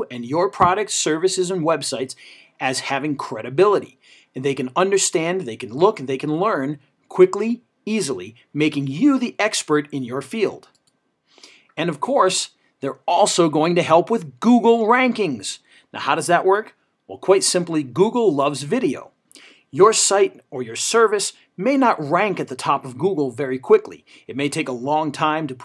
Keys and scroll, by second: 9.4 Up, 12.9 ctrl+v, 15.9 ctrl+v, 18.9 ctrl+v, 22.1 ctrl+v, 25.0 ctrl+v.